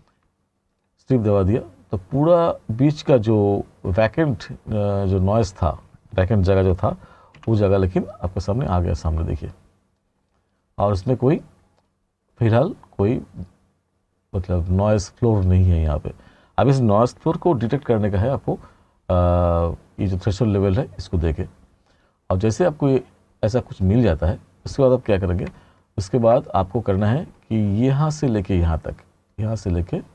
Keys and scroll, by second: 7.4 e, 17.7 t.